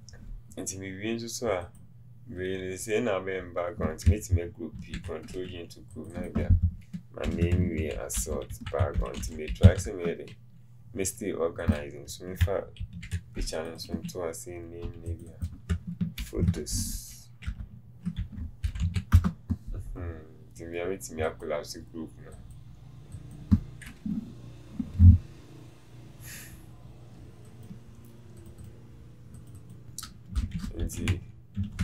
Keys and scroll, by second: 30.5 shift+t.